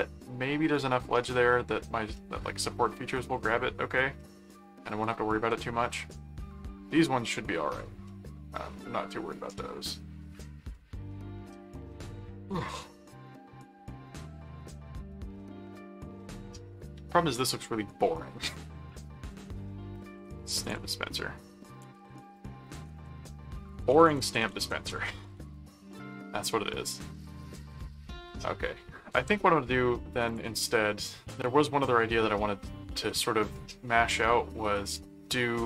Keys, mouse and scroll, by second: 0.2 middle click, 2.2 middle click, 4.2 middle click, 5.1 middle click, 6.0 middle click, 8.1-9.2 middle drag, 9.7 middle click, 10.7-16.8 middle drag, 17.4 click, 18.5 ctrl+s, 19.7-26.1 typing, 29.1 ctrl+Tab, 30.3 ctrl+click, 31.8 middle click, 33.1 middle click, 34.1-35.6 middle drag.